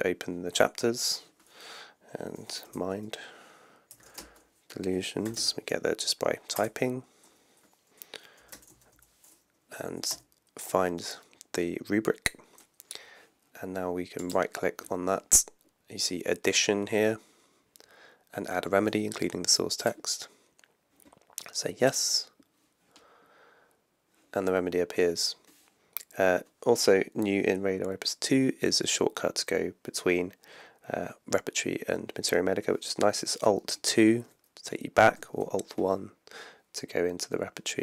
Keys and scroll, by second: 2.7 Return, 3.7-5.9 typing, 6.5 Return, 8.2-9.4 typing, 10.1 Return, 33.6 alt+2, 35.3 alt+1.